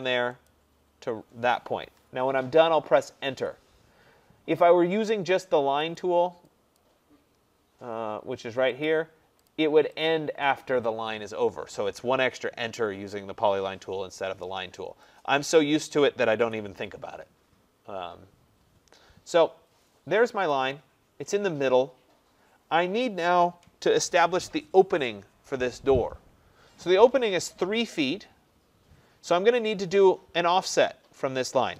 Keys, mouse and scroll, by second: 0.5 click, 3.3 Return, 6.0 click, 6.8 click, 8.9 click, 9.5 click, 10.1 click, 15.6 click, 16.5 Delete, 19.4 middle click, 19.5 middle click, 20.6 click, 21.3 middle click, 21.4 middle click.